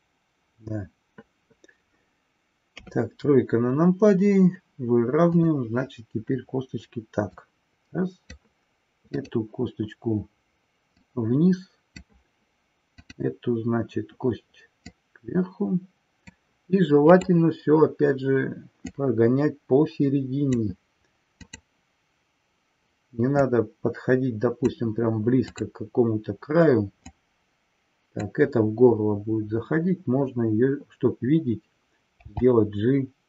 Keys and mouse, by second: 2.7 KP_3, 5.2-6.2 drag, 7.2 click, 11.0-12.1 drag, 13.1-14.1 drag, 15.0-16.4 drag, 19.0-20.6 drag, 21.3-22.3 drag, 23.4-24.7 drag, 25.3-26.3 drag, 27.1-28.3 drag.